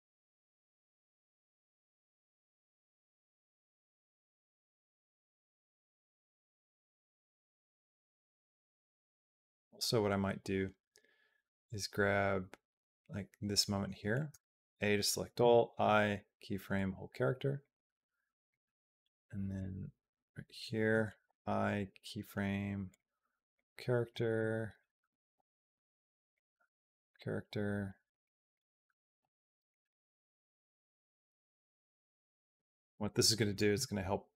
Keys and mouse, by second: 14.1 a, 15.2 i, 17.4 click, 19.4-20.4 drag, 21.1 i, 23.4 click, 24.2 click, 25.2 i, 26.9-28.4 drag, 29.0 i, 31.1 click.